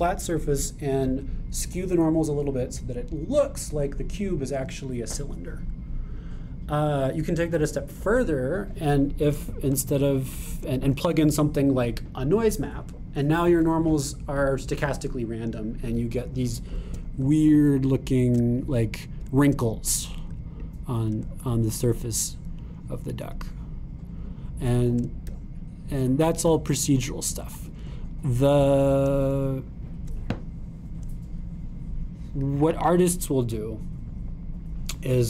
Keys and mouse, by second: 16.9-20.9 drag, 18.8 shift+middle click, 21.3 super+click, 22.3-35.2 shift+drag.